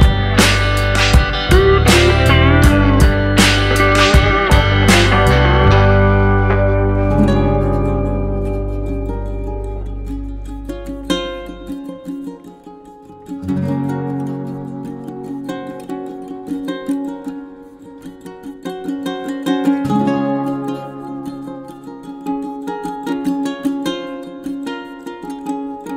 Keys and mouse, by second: 0.5 middle click, 1.4 f, 1.8 middle click, 2.8 alt+click, 3.9 f, 4.3 middle click, 5.2 middle click, 5.7 shift+middle click, 6.4 middle click, 8.6 middle click, 9.2 click, 9.6 middle click, 10.4 shift+middle click, 11.1 click, 11.9 middle click, 12.4 shift+middle click, 12.8 middle click, 15.2 middle click, 17.5 middle click, 18.0 middle click, 18.6 shift+middle click, 20.2 middle click, 21.6 middle click, 22.1 middle click, 22.4 shift+middle click.